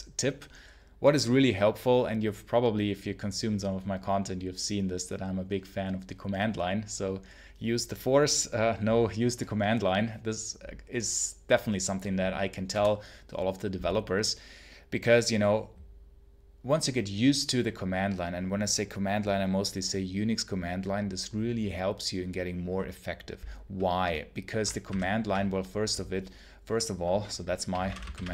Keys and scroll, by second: 24.7 ctrl+h, 27.3-28.3 typing.